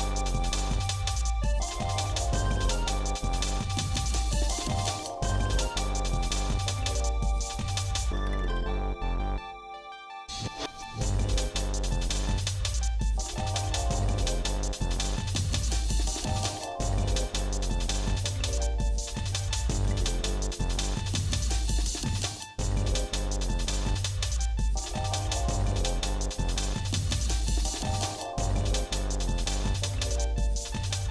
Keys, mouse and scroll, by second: 0.0 click, 0.7 scroll down 1, 0.8 scroll up 1, 1.2 middle click, 2.0 shift+middle click, 2.6 scroll up 2, 2.9 scroll down 1, 3.4 shift+middle click, 4.3 middle click, 5.2 ctrl+s, 9.8 middle click, 11.3 click, 14.1 shift+middle click, 15.6 click, 16.5 middle click, 17.0 shift+middle click, 18.3 click, 19.0 shift+middle click, 19.9 shift+middle click, 20.8 scroll up 1, 21.4 shift+click, 23.0 ctrl+j, 24.1 shift+middle click, 24.7 middle click, 25.3 shift+middle click, 26.0 click, 26.9 middle click, 28.5 scroll down 1, 29.3 middle click, 29.9 shift+middle click, 30.3 shift+middle click, 30.7 middle click.